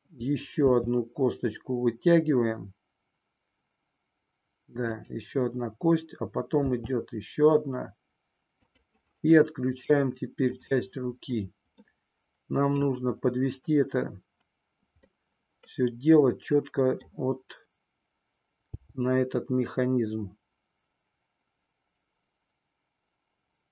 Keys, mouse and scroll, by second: 0.6 e, 4.9 click, 6.8 e, 8.6 click, 10.6 click, 12.0 middle click, 15.0-17.2 middle drag, 18.7 g.